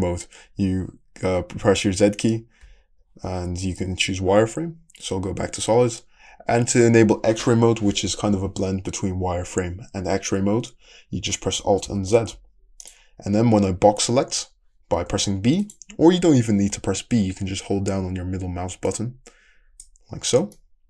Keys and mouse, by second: 2.6 z, 5.4-6.9 middle drag, 11.6 alt+click, 11.9 alt+z, 12.0 middle click, 12.8-14.9 drag, 14.9-18.9 middle drag, 18.9-20.8 drag.